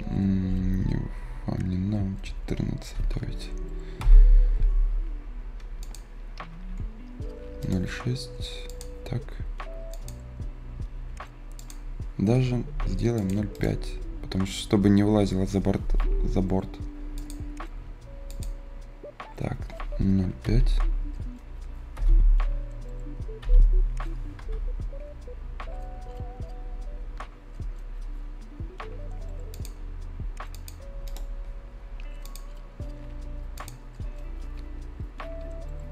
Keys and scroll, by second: 2.5-3.4 typing, 3.9 Return, 12.5 Delete, 20.1-22.0 typing, 23.3 e, 24.3 Return.